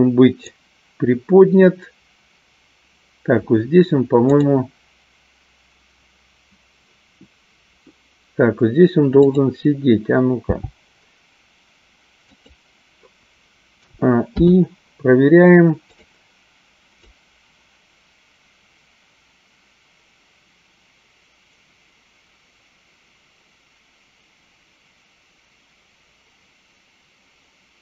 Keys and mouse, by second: 5.0 click, 9.4 click, 10.6 g, 14.7 i, 16.4 click, 17.6-27.8 drag.